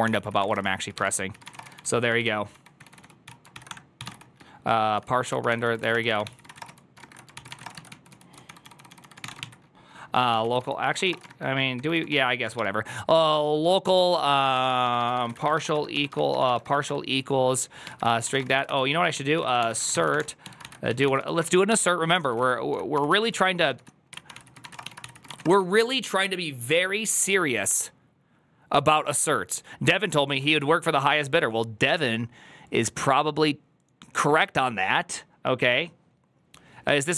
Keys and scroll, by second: 0.0-12.7 typing, 7.2 ctrl+c, 7.4 Return, 11.6 ctrl+^, 14.2-26.2 typing, 29.9 alt++, 30.4 alt+[.